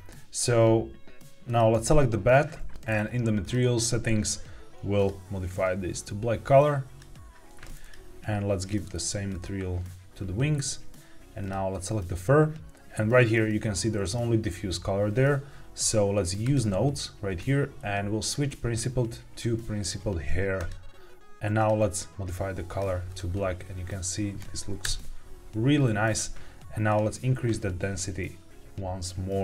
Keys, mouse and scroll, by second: 1.4 click, 1.6 click, 2.7 click, 3.3 click, 4.9 click, 7.7 click, 8.5 click, 11.3 click, 16.3 click, 18.1-20.6 drag, 21.5 click, 23.0 click, 24.7 KP_0, 25.6-26.0 scroll up 2, 26.8 click.